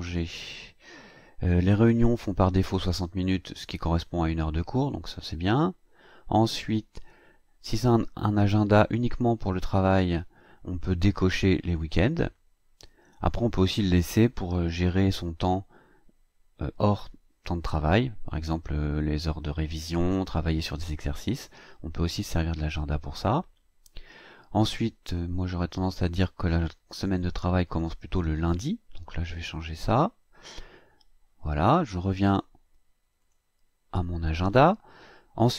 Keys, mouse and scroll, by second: 0.2-0.5 scroll down 1, 1.1-1.8 scroll down 2, 1.8 scroll up 2, 24.0 scroll down 2, 25.2 click, 27.8 click, 29.9 scroll down 2, 30.7 scroll up 2, 31.3-31.7 scroll up 1, 33.3 click.